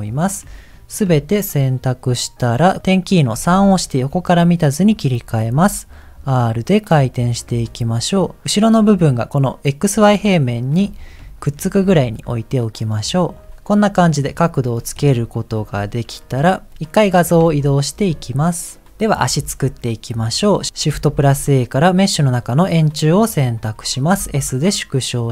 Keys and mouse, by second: 0.7 ctrl+click, 3.5 KP_3, 5.5 r, 7.5 g, 11.2 shift+middle click, 11.8 g, 15.1 KP_1, 16.2 click, 17.3 g, 19.4 ctrl+s, 21.1 shift+a, 24.1 s.